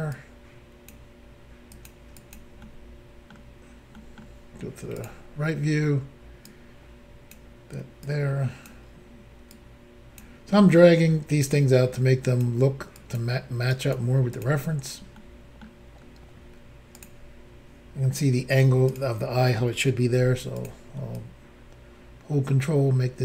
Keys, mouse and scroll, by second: 0.1 click, 1.7 click, 1.8 click, 2.1 click, 2.3 double click, 2.6 middle click, 3.9 middle click, 5.0 click, 5.0 click, 5.4 scroll up 3, 6.5 click, 8.1 click, 9.5 click, 10.5-11.4 scroll down 3, 11.9 click, 13.0 click, 13.2 click, 13.7 click, 14.3 click, 14.4 click, 15.2 middle click, 16.0 scroll down 1, 17.0 click, 18.9 click, 20.1 f, 20.6 click, 21.2 ctrl+click.